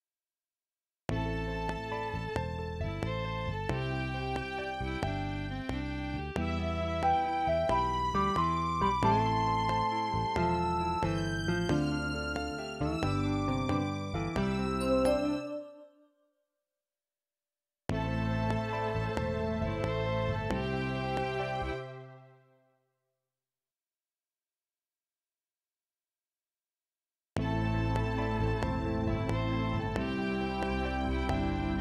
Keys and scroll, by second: 1.0 space, 2.3 ctrl+Up, 15.3 space, 17.8 space, 18.9 ctrl+Left, 21.7 space, 27.3 space.